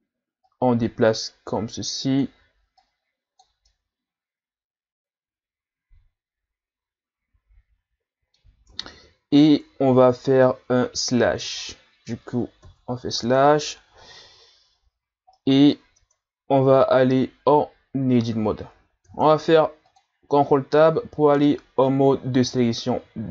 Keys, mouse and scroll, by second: 0.5-3.7 drag, 3.7-6.7 middle drag, 8.7 Tab, 12.6 KP_Divide, 14.8-15.4 scroll down 3, 15.4 middle click, 16.0 Tab, 16.6-17.2 scroll down 1, 19.1 ctrl+Tab.